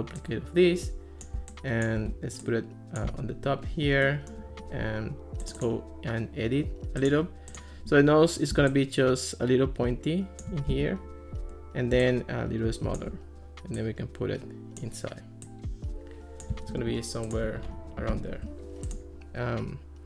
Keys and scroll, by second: 10.7 Escape, 16.7 alt+r.